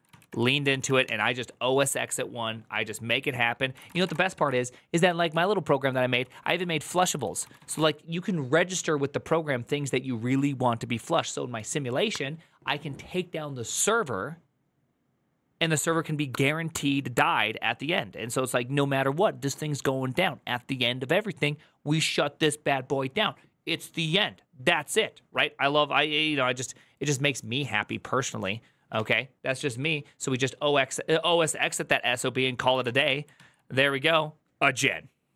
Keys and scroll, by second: 0.0-1.5 typing, 3.7 ctrl+c, 3.9 typing, 4.3 ctrl+u, 5.1 ctrl+u, 5.8-8.1 typing, 32.6-33.4 typing.